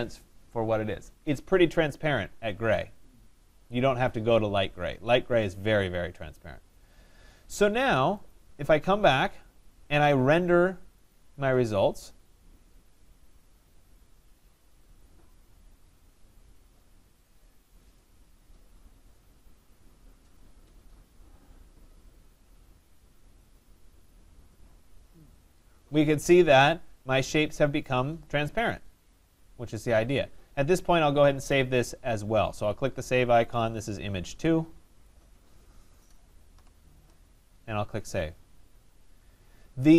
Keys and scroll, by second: 35.6 BackSpace.